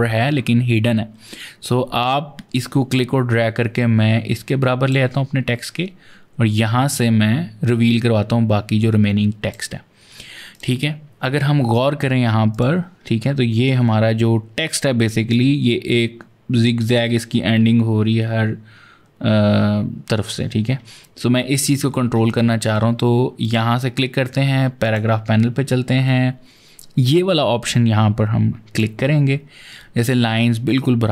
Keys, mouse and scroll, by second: 2.4 click, 6.8 click, 10.4 click, 12.3 click, 15.1 click, 21.9 ctrl+z, 22.5 v, 23.2 click, 24.6 click, 28.6 click.